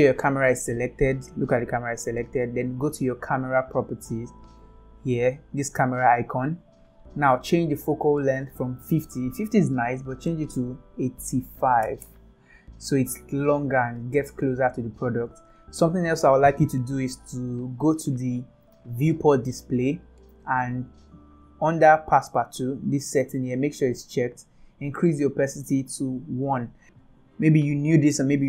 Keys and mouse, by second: 0.3 click, 4.8 click, 8.7-12.1 drag, 19.1 click, 24.1 click, 25.6-26.7 drag.